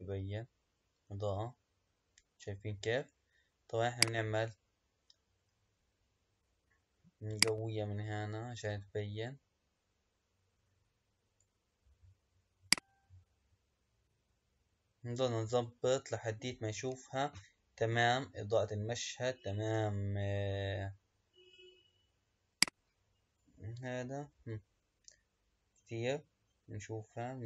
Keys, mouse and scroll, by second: 4.1 click, 7.4-10.6 drag, 12.6 click, 18.9-19.5 scroll up 1, 22.5-25.8 drag.